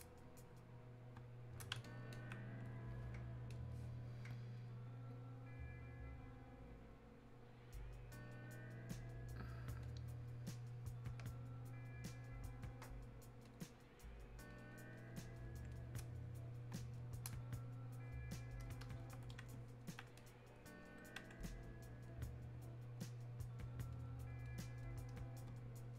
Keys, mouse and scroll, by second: 9.9 click, 13.5-25.9 drag.